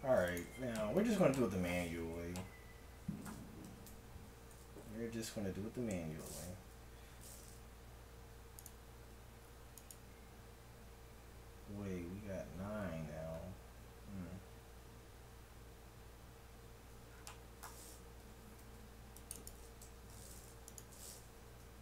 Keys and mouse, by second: 3.6 KP_1, 4.0 KP_7, 8.6-11.7 right drag, 18.1 a, 18.6 ctrl+r, 19.8 a, 21.5 w.